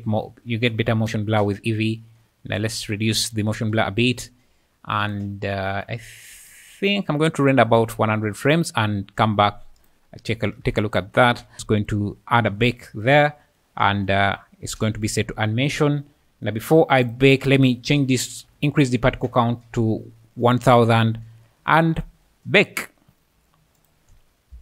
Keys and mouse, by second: 2.6 click, 5.0 click, 6.7 shift+click, 7.8 click, 9.8-11.3 drag, 10.7 KP_0, 11.5 BackSpace, 11.8 click, 15.1 click, 17.0-19.2 drag, 18.5 KP_0, 18.7 KP_0, 21.7 ctrl+s.